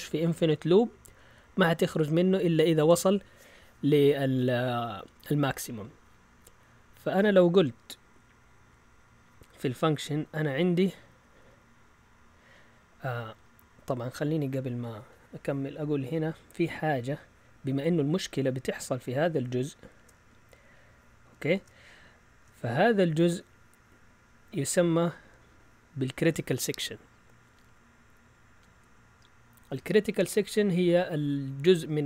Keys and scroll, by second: 2.1 Down, 11.2 Up.